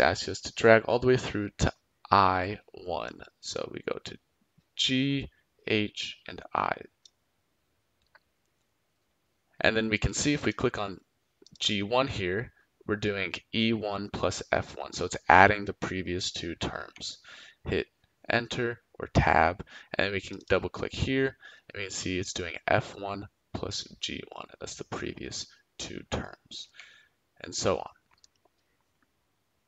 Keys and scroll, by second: 16.7 Tab, 26.6 Tab.